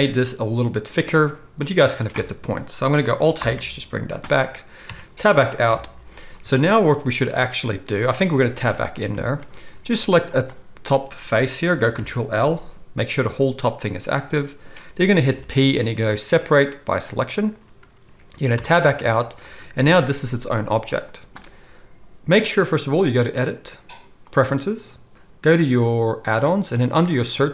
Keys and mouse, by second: 3.3 alt+h, 4.8 Tab, 5.6 KP_1, 8.5 Tab, 10.2 click, 10.4-23.2 middle drag, 11.9 ctrl+l, 13.0 g, 15.3 p, 18.5 Tab, 19.7 g, 23.2-27.5 drag.